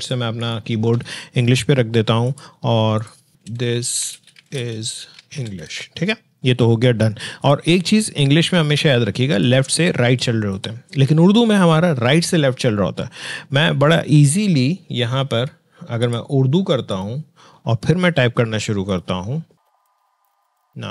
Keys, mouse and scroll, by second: 3.0-6.0 typing, 7.4-10.5 drag, 16.0 click, 19.5-20.9 typing.